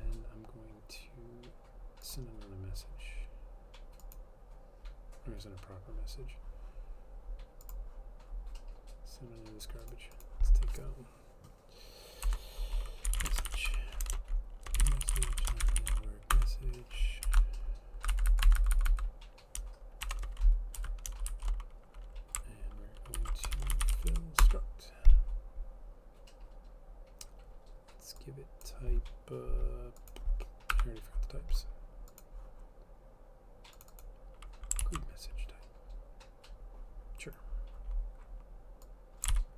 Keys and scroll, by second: 12.4 Return, 12.9-17.9 typing, 18.0 Right, 18.2 Down, 18.4 Right, 18.9 Right, 19.0 Right, 20.2-22.1 typing, 20.9 End, 23.3 ctrl+p, 23.4-24.6 typing, 29.6 typing, 30.8 F12, 35.0 ctrl+c, 39.4 ctrl+v.